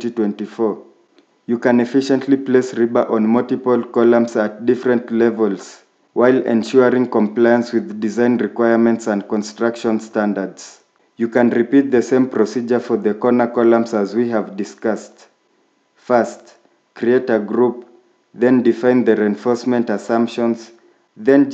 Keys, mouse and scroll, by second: 0.7-1.3 scroll up 1, 4.6 scroll down 1, 6.6 middle click, 13.2-14.0 scroll down 1, 15.4 scroll up 1, 15.5 middle click.